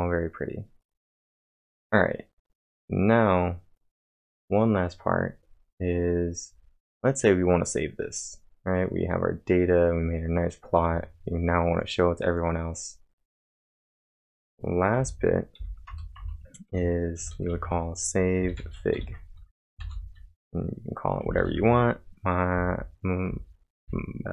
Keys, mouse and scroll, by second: 2.5-3.8 typing, 11.0-11.7 typing, 11.2-13.3 drag, 13.3 click, 14.0 click, 14.9-15.6 typing, 15.9 Return, 16.2 Return, 17.3-19.8 typing.